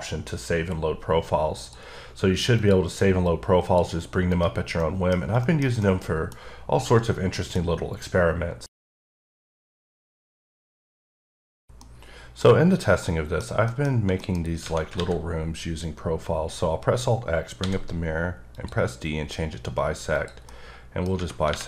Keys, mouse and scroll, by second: 1.7 click, 2.6 click, 3.3 click, 4.4 right click, 4.8 middle click, 5.2 scroll down 2, 5.5 middle click, 5.9 middle click, 6.3 scroll down 1, 6.9 middle click, 12.5-13.0 scroll up 4, 13.0 middle click, 13.6 middle click, 13.8 scroll down 1, 14.2 middle click, 15.0 alt+x, 17.6 d, 18.5 click, 20.1 click, 20.5 middle click, 21.5 3.